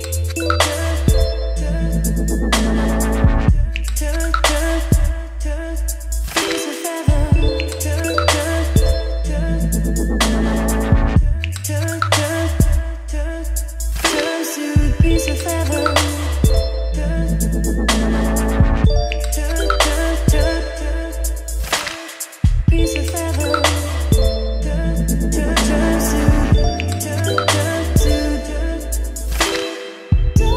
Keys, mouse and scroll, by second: 4.0-12.6 drag, 12.6 w, 12.8 e, 12.9 l, 13.4 Return, 14.7 w, 14.9 e, 15.3 Return, 15.9 t, 16.1 a, 16.3 h, 17.0 Return, 17.6 h, 19.7 n, 20.0 Return, 20.2 n, 20.5 k, 22.5 click, 23.4 y, 23.6 o, 23.9 u, 25.4 click, 28.4 click, 28.9-30.5 typing.